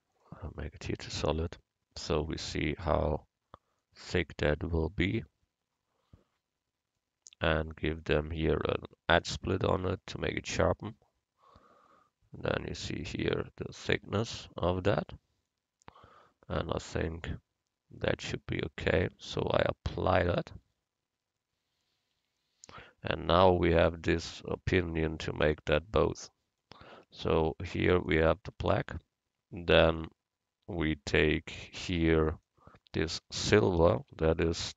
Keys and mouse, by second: 0.2-2.0 drag, 2.1 middle click, 20.3-22.1 drag, 22.2 Tab, 27.0 click, 27.0 a, 28.6 Tab, 32.3-34.2 drag.